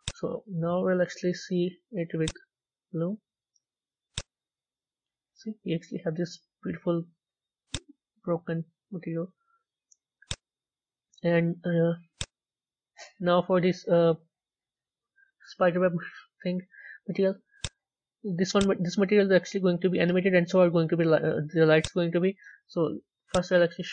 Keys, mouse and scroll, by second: 0.0-2.4 drag, 2.4 z, 4.0-5.0 drag, 5.0-7.6 middle drag, 7.6-10.2 drag, 10.2 z, 12.1 click, 13.9-21.7 middle drag, 21.7-23.9 drag.